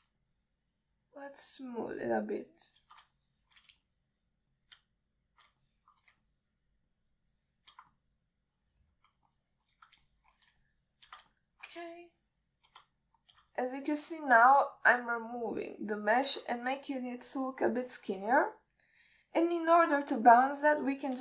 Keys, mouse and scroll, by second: 0.6-1.0 alt+shift+middle drag, 1.5-2.7 shift+drag, 2.8 shift+click, 3.8 shift+click, 4.5 alt+shift+middle click, 5.1 shift+click, 5.8 shift+click, 7.0 alt+shift+middle click, 7.5 shift+click, 8.2 shift+click, 9.3-10.3 middle drag, 10.6-11.0 alt+shift+middle drag, 11.3 alt+shift+middle drag, 11.9-12.4 shift+drag, 12.6 alt+shift+middle drag, 13.3-14.0 shift+drag, 14.3-14.6 alt+middle drag, 15.0-15.6 alt+shift+middle drag, 16.1-16.5 shift+drag, 16.8-17.5 shift+drag, 18.0 alt+middle click, 19.2-19.5 alt+shift+middle drag, 19.9-20.8 middle drag.